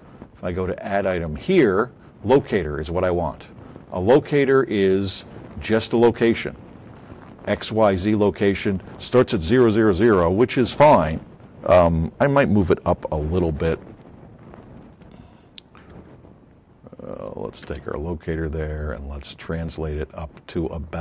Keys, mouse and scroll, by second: 1.2 click, 3.8 click, 5.9 middle click, 16.0 w, 17.1 click, 17.7 w, 18.2 middle click.